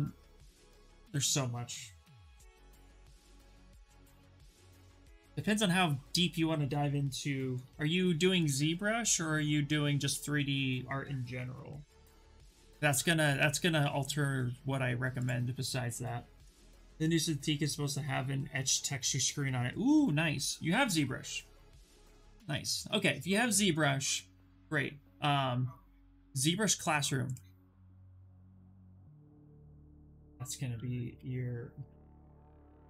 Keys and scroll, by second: 1.9-3.5 typing, 3.8 Return, 7.5 ctrl+-, 7.7 ctrl+-, 8.0 ctrl+-, 8.3 ctrl+-, 8.7 ctrl+-, 11.4 ctrl+=, 27.5-29.1 typing, 30.4-32.8 typing.